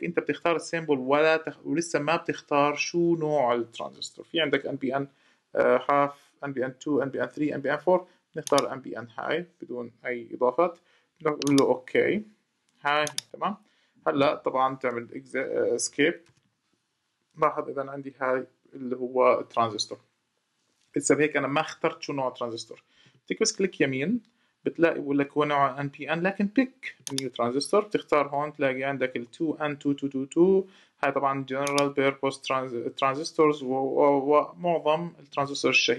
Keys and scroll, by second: 16.0 ↺.